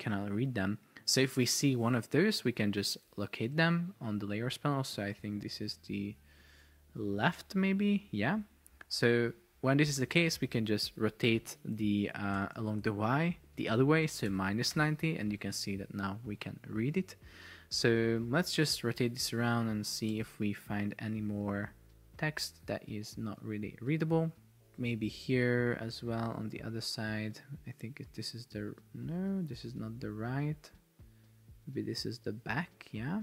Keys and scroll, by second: 11.6 Right, 11.9 Left, 12.5 Right, 12.9 Left, 14.8 Return, 20.4 shift+Down, 24.1 shift+Up, 24.4 shift+Down.